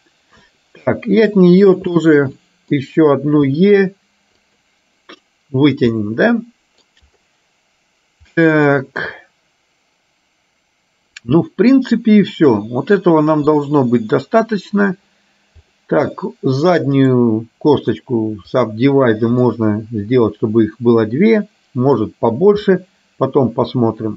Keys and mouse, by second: 1.3 click, 2.0 middle click, 6.0 middle click, 8.6-13.5 middle drag, 15.8 click, 17.0-18.9 right drag, 19.5-22.0 middle drag, 22.8-24.1 middle drag.